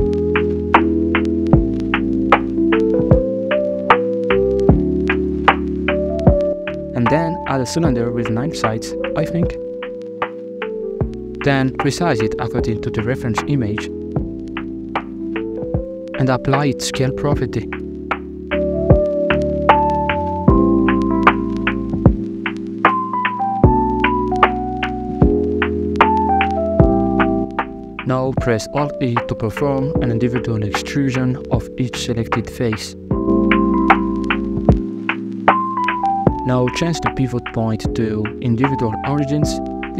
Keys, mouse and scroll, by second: 1.0 KP_Decimal, 1.6-2.0 scroll down 5, 2.0 middle click, 3.0-5.0 drag, 5.0 r, 6.4 scroll up 3, 6.6 middle drag, 6.8 shift+a, 9.8 middle click, 10.7 s, 11.8 KP_1, 12.0 KP_5, 12.8 scroll up 3, 13.2 shift+middle click, 13.4 scroll up 1, 13.6 g, 14.7 scroll up 1, 14.9 s, 16.8 s, 17.0 ctrl+a, 18.7 Tab, 19.4 shift+middle click, 19.6 alt+z, 20.1-20.8 scroll up 1, 21.0 ctrl+r, 22.1 ctrl+b, 23.5 Tab, 25.7 alt+right click, 26.8 alt+shift+right click, 27.7 middle click, 28.6 alt+e, 33.2 alt+e, 35.9 alt+z, 36.1 scroll down 1, 36.3-36.7 middle drag, 37.1-38.0 drag, 38.7 s.